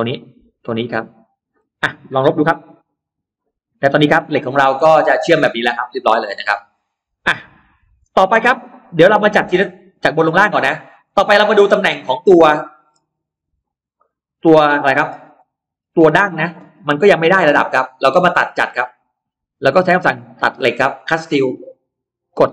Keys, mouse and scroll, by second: 0.2 click, 1.1-2.0 scroll down 1, 2.6 e, 2.9 click, 3.7 space, 3.8-4.8 scroll up 2, 4.5-6.5 middle drag, 5.1-5.5 scroll down 1, 6.5 scroll, 7.2 middle click, 7.6 scroll, 8.0-8.7 scroll down 2, 8.3 middle click, 9.1 scroll up 1, 9.9 scroll up 1, 10.7-12.7 middle drag, 12.9-13.2 scroll up 1, 13.5 click, 13.9 middle click, 15.2-15.5 scroll up 1, 15.3 middle click, 15.7 scroll down 1, 16.7 middle click, 17.3-17.7 scroll up 1, 18.7 click, 20.8 click, 22.1 click.